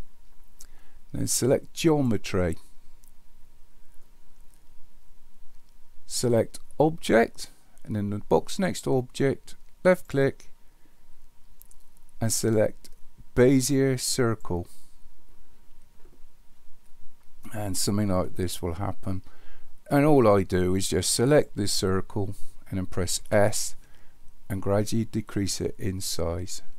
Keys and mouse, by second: 1.9 click, 6.8 click, 9.8-14.6 drag, 21.3 click, 23.3 s.